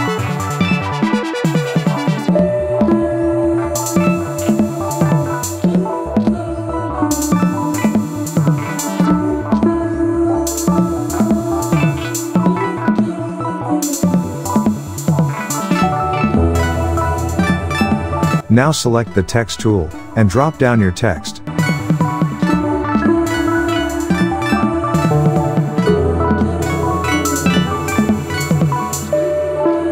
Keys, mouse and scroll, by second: 2.1 click, 2.8-9.1 typing, 10.6 click, 10.9 space, 11.1 click, 11.3-11.6 space, 12.0-12.3 alt+scroll up 1, 12.5 space, 12.6-13.1 click, 12.9 space, 13.9 alt+scroll up 1, 14.1-15.1 click, 14.5 space, 15.0 space, 16.7 click, 16.9-17.2 space, 17.9 click, 20.9-22.2 typing, 22.5 Return, 23.5-26.5 typing, 27.3 click, 27.9 ctrl+t, 28.7-29.9 drag.